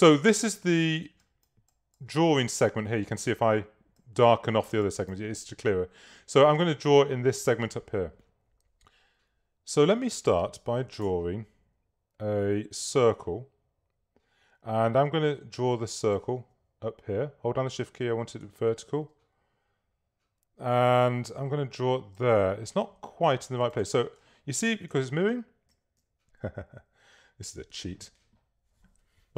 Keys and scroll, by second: 11.1 s, 25.0 Down, 26.7 Up.